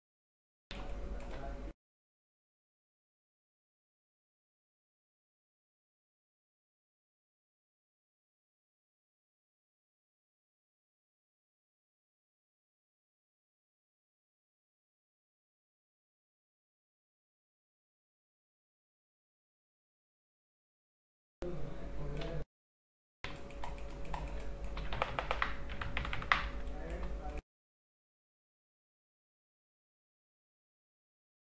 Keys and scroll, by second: 3.8 space, 7.4 space, 12.2 space, 14.7 space, 19.2 space, 22.4 space, 25.0 ctrl+KP_Subtract, 26.1 ctrl+KP_Add, 26.5 space.